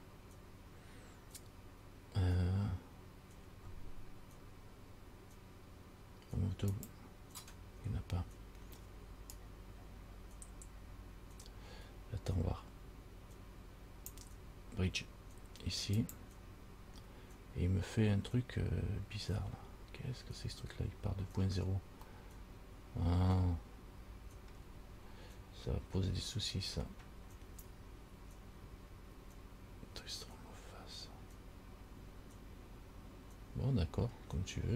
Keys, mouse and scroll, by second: 6.9 click, 9.5 click, 16.1 click, 21.6-22.2 scroll down 4, 22.4 middle click, 24.1 middle click.